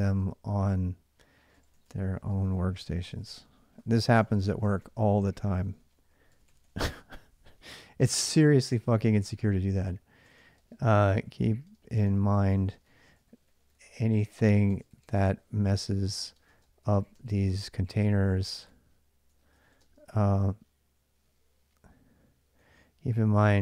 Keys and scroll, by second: 0.0-6.6 typing, 10.1-20.0 typing, 22.2-23.6 typing.